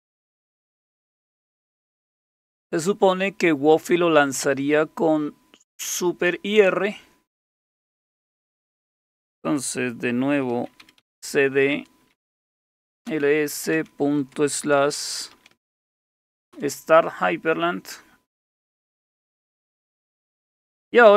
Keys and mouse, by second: 10.6-11.5 typing, 11.7 Return, 12.5-16.0 typing, 16.5 Return, 18.2-18.9 typing.